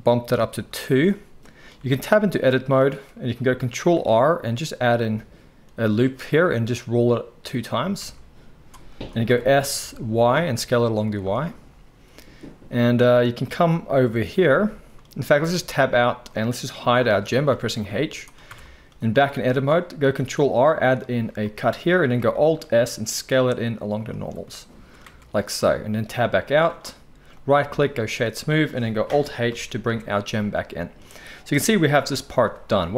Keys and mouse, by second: 1.8 Tab, 3.9 ctrl+r, 5.4-16.2 middle drag, 7.8 s, 9.2 s, 15.7 Tab, 16.2 click, 16.4-27.3 middle drag, 17.5 h, 18.4 Tab, 20.2 ctrl+r, 22.4 alt+s, 25.0 Tab, 27.3-28.3 right drag, 28.3-32.9 drag, 29.5 alt+h, 29.9 alt+a, 31.5 KP_1.